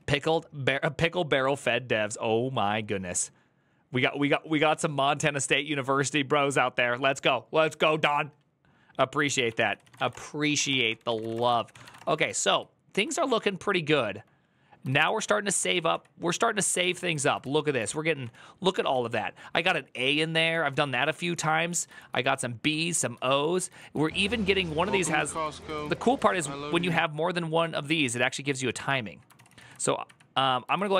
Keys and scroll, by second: 9.1 alt+{, 9.3 ctrl+c, 9.5 ctrl+c, 9.5-11.8 typing, 10.7 ctrl+d, 10.9 ctrl+c, 11.3 ctrl+u, 11.5 ctrl+c, 11.8 Return, 12.1 ctrl+u, 14.8 2, 15.7 Up, 16.0 Return, 16.4 ctrl+a, 16.6 [, 16.8 ctrl+u, 17.2 ctrl+u, 20.5 ctrl+d, 20.5-21.3 typing, 22.7-29.1 j, 29.1 ctrl+c, 29.2 ctrl+c, 29.4 ctrl+c, 29.8 Up, 30.5 ctrl+Left, 30.7 ctrl+Left.